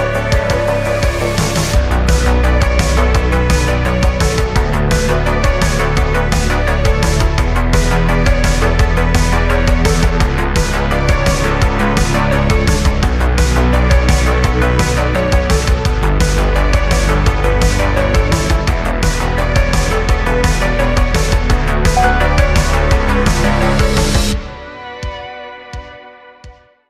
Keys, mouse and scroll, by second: 1.0 click, 1.3 click, 2.2-3.2 drag, 4.4-6.5 drag, 7.6-10.4 drag, 10.4 Tab, 11.5 a, 12.7 3, 14.0 i, 19.2 x, 20.3-21.5 middle drag, 21.5 click, 21.8 Tab, 22.1 click, 22.4-26.1 middle drag.